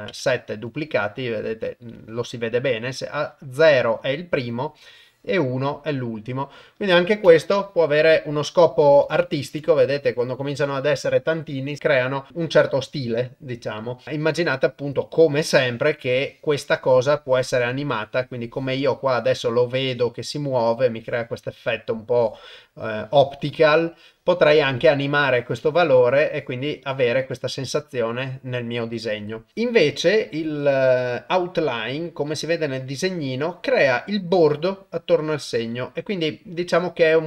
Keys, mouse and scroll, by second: 2.9-3.9 drag, 5.0 click, 7.4 ctrl+middle click, 8.6 shift+middle click, 9.1 ctrl+middle click, 9.7 shift+middle click, 11.8 ctrl+middle click, 15.8-27.9 drag, 29.9-33.0 drag.